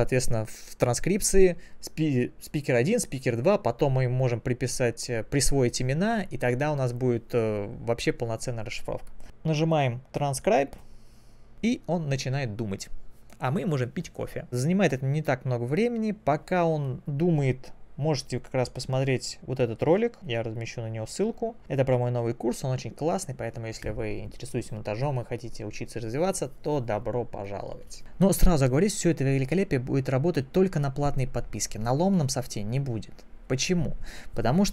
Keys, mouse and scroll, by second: 11.2 click, 20.0 click, 20.3 click, 21.0 click.